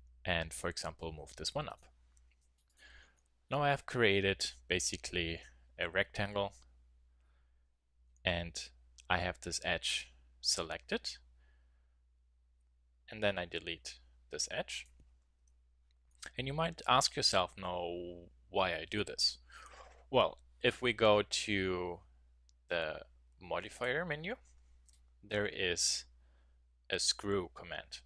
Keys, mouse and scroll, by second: 1.1 a, 4.4 middle click, 8.1 x, 15.4 Tab, 16.1-17.2 middle drag, 23.7-25.5 drag.